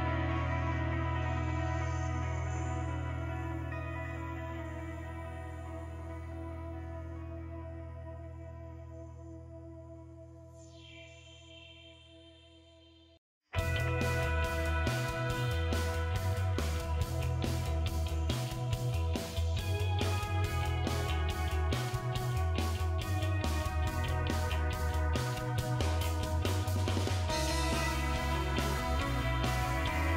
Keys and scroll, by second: 0.0-1.4 typing, 3.4 ctrl+v, 18.9-19.9 typing.